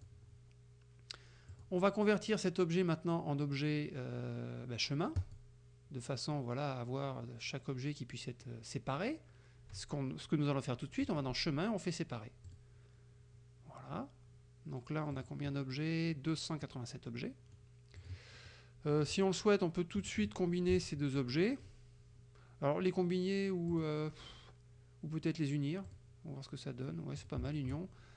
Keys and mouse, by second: 0.0 click, 1.6 click, 5.2 click, 11.2 click, 12.5 click, 15.2 click, 17.2 click, 18.0 click, 18.4 click, 18.9 click, 20.0 F2, 20.2 click, 20.8 shift+click, 23.8 click, 25.9 click, 27.2 click, 27.7 shift+click.